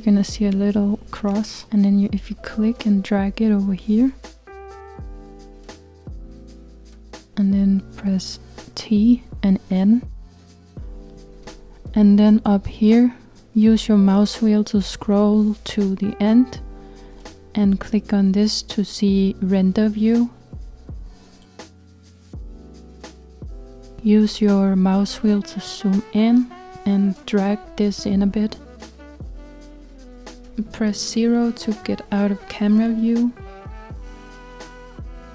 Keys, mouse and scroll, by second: 1.5-8.6 drag, 8.6 t, 10.3 n, 18.1 click, 22.9-25.5 scroll up 3, 25.5-27.6 scroll down 1, 27.6-32.0 drag, 32.0-33.0 scroll down 2, 34.1 KP_0.